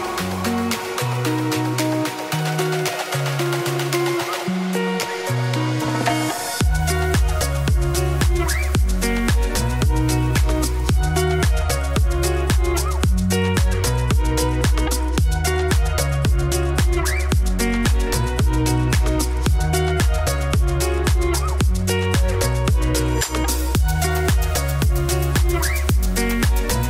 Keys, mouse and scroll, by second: 1.6 click, 2.4 click, 2.9 middle click, 3.2-4.0 scroll up 11, 3.4 shift+middle click, 4.0 scroll down 1, 4.1-5.1 shift+middle drag, 5.1 click, 6.2 click, 6.8 click, 7.0-7.5 scroll down 4, 7.5 click, 7.5-9.9 middle drag, 9.9-10.3 scroll down 1, 10.3 KP_0, 10.6 scroll down 3, 10.8 shift+middle click, 11.2 z, 11.7 ctrl+s, 12.7-15.7 typing, 13.3 click, 13.5 shift+middle click, 14.5 alt+d, 16.5 middle click, 17.4-17.7 scroll up 2, 17.7 Tab, 17.9 s, 18.7 s, 21.8 middle click, 21.9 g, 22.8 middle click, 23.4 Tab, 23.6 Tab, 24.1 click, 24.2 scroll down 5, 24.5 click, 24.7 KP_0, 26.1 scroll down 1, 26.2 z.